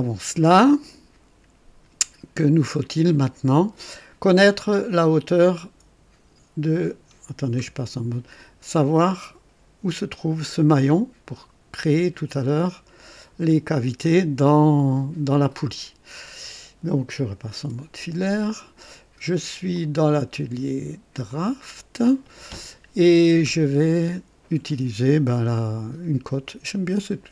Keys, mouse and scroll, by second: 7.5 &, 17.6 &, 21.4 click.